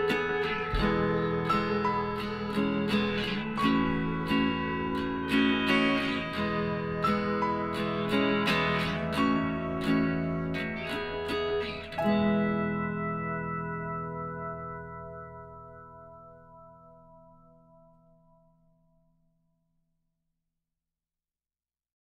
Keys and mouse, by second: 1.4 l, 2.9 e, 10.0 click, 10.1 z, 11.7 b, 14.2-17.1 drag, 18.2 s, 21.3-22.0 middle drag.